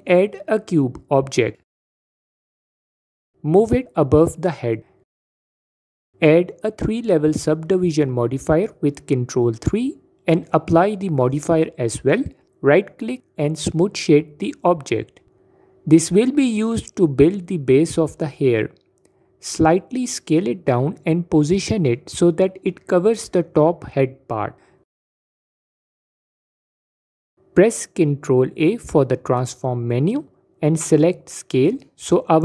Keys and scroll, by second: 6.2 ctrl+3, 19.9 s, 24.8 s, 28.0 ctrl+a.